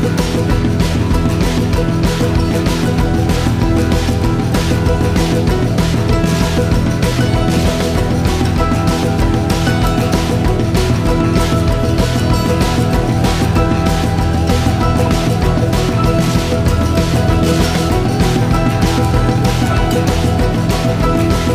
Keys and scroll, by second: 19.2 ctrl+l.